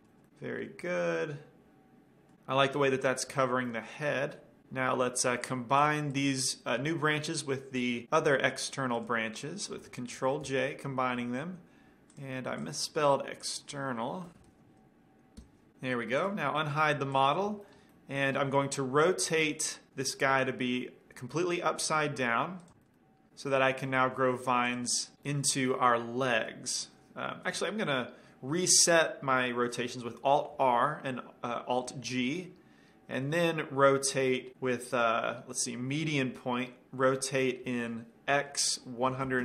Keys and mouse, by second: 1.2 drag, 1.4-2.2 middle drag, 2.9-4.9 middle drag, 5.8-8.1 drag, 9.2-10.9 drag, 10.8 ctrl+j, 12.4-14.6 drag, 14.6 BackSpace, 16.5-19.3 drag, 18.0-18.7 middle drag, 20.6 r, 22.9-24.0 drag, 23.1-23.8 middle drag, 24.0-24.6 middle drag, 24.4 r, 25.0 drag, 25.5 middle click, 30.7 alt+r, 32.2 alt+g, 33.7-34.6 middle drag, 35.3-36.9 drag, 36.9-39.3 middle drag, 37.9 r.